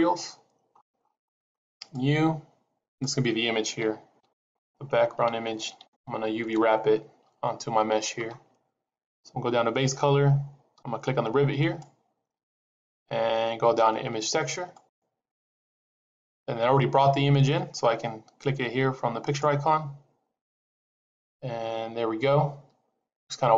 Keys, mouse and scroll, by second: 0.6-1.7 scroll up 8, 1.7 click, 4.0 click, 11.5 click, 19.2 click.